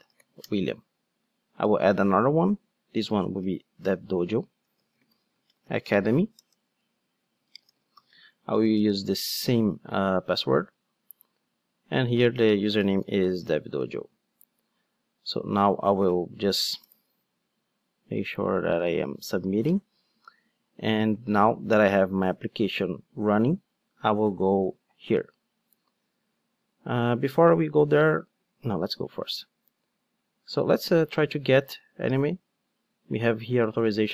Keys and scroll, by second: 1.5 super+n, 10.4 super+v.